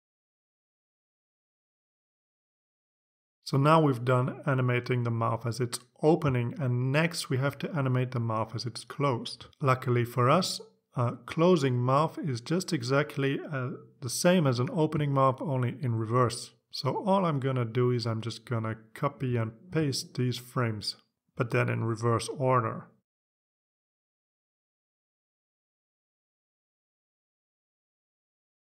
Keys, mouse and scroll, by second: 8.8 click, 9.8 click, 11.1 click, 11.8 click, 12.9 click, 14.0 click, 15.4 right click, 16.5 click, 17.0 click, 18.3 ctrl+c, 19.0 click, 19.6 ctrl+v, 20.5 click, 21.1 click, 22.0 ctrl+c, 22.8 click, 24.4 ctrl+v, 25.4 click, 26.0 ctrl+c, 26.9 ctrl+click, 27.3 ctrl+v.